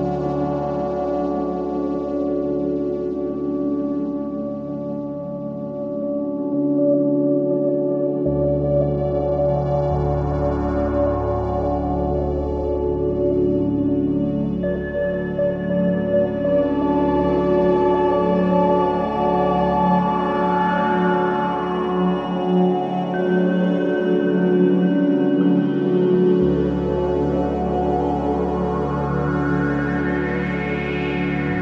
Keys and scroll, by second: 1.8 2, 5.0 4, 6.9 ctrl+d, 7.1 Escape, 8.3 ctrl+d, 8.4 Escape, 9.5 ctrl+d, 9.6 Escape, 20.4 Delete, 21.7 3.